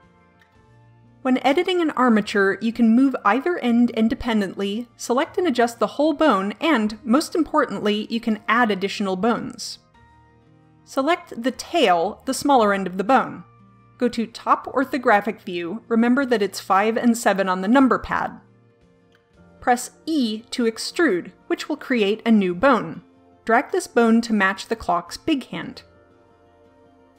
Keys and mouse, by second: 0.9 g, 3.0-4.1 drag, 3.9 g, 5.5-6.8 drag, 6.8 g, 11.1 click, 11.2-15.1 middle drag, 15.1 KP_7, 16.1 KP_5, 20.2 e.